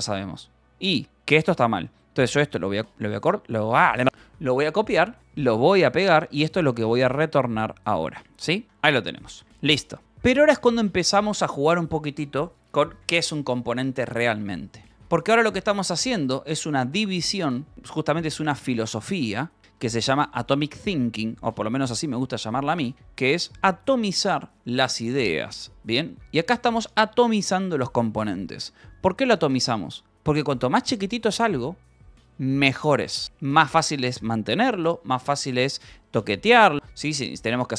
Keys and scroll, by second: 0.1 ctrl+j, 0.2-3.0 typing, 1.0 Return, 4.7 ctrl+k, 5.2-9.2 typing, 7.3 Escape, 9.2 ctrl+s, 10.5 space, 10.7 u, 11.3 n, 14.5 k, 14.9 shift+;, 16.8-19.6 typing, 17.7 Return, 20.4 ctrl+s, 21.5 k, 21.6 Return, 22.1 p, 22.6 Escape, 23.1 k, 23.4 d, 23.6 Escape, 24.1 [, 24.5 j, 24.7 Return, 25.6 j, 26.5 k, 26.9 j, 27.6 k.